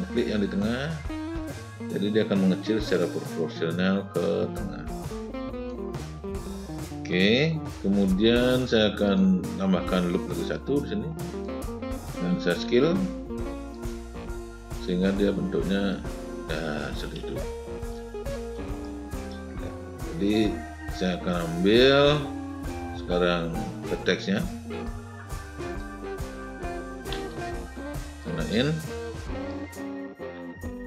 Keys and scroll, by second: 12.4 r, 26.9 w.